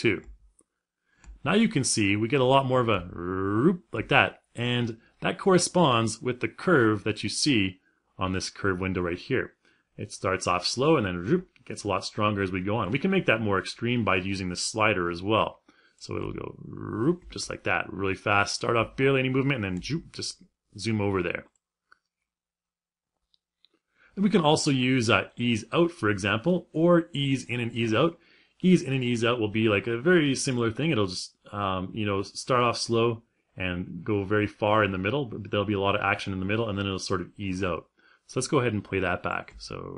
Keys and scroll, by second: 15.8 space, 39.1 space.